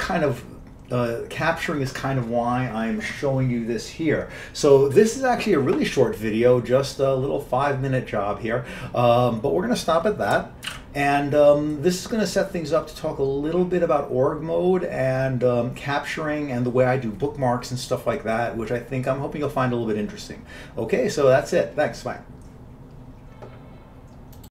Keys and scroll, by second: 10.8 ctrl+x, 11.0 ctrl+c.